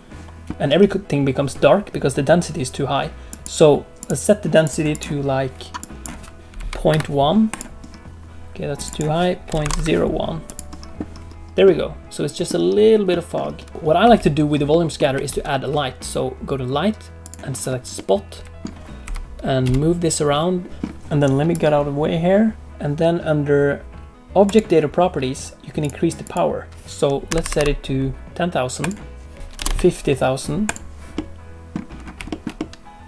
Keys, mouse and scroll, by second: 0.5 middle click, 3.2 click, 4.6 click, 8.7 click, 11.6 middle click, 13.0 middle click, 13.7 space, 14.0 space, 14.6 middle click, 15.2 shift+a, 17.5-17.9 scroll down 3, 17.9 middle click, 19.0 g, 20.7 middle click, 20.7 r, 24.4 click, 25.8 click, 27.4 0, 27.5 0, 29.3 click, 31.1 middle click, 31.9 scroll up 2, 32.2 shift+middle click, 32.5 middle click.